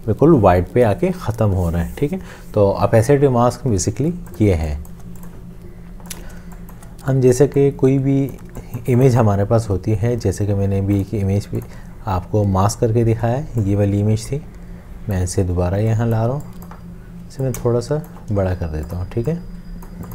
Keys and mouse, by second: 4.1 space, 6.8 space, 15.8 space, 17.5 alt+click.